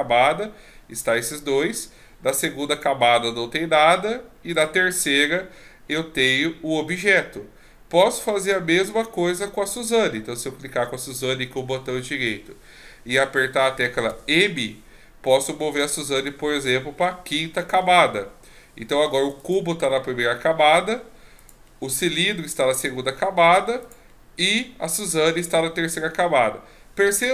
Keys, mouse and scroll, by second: 4.5 click, 8.4 click, 9.8 right click, 14.1 m, 19.4 click, 21.4 click, 23.8 click.